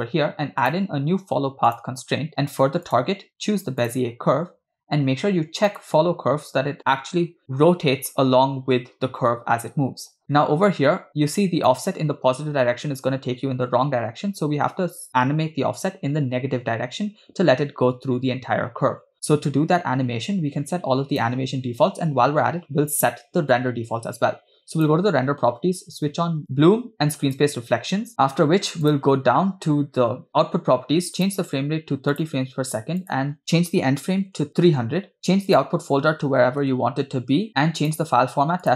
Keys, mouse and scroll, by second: 0.7-2.0 drag, 3.0-4.1 drag, 5.9 click, 10.5 middle click, 11.8-21.2 drag, 24.8 click, 26.6 click, 27.3 click, 29.0 click, 33.1-34.7 drag, 34.4 0, 35.5-36.7 drag, 36.5 /, 37.5 scroll down 3, 37.9-38.7 drag.